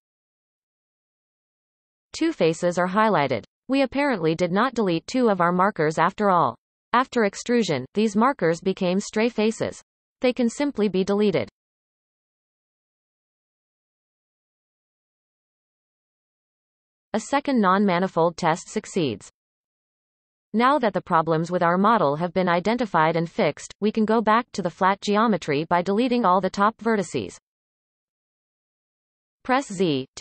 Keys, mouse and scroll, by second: 0.5-2.2 middle drag, 2.2-3.1 scroll up 7, 3.1-8.2 middle drag, 8.2 x, 11.6-14.7 drag, 17.6-18.3 scroll down 7, 18.3-23.5 middle drag, 23.5 KP_1, 24.6 b, 26.8 x, 28.3 middle click, 28.8 Tab, 29.4 z.